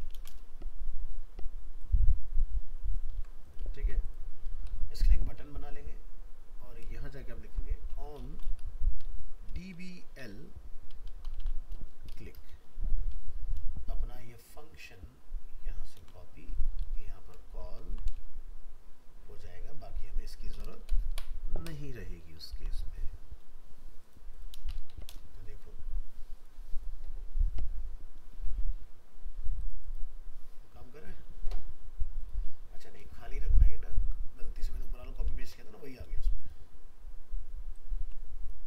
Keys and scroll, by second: 0.2 ctrl+c, 3.1 ctrl+v, 3.8 ctrl+s, 7.0 shift+Left, 16.0 ctrl+c, 16.8 ctrl+v, 22.0 ctrl+s, 35.4 ctrl+s, 38.0 alt+Tab.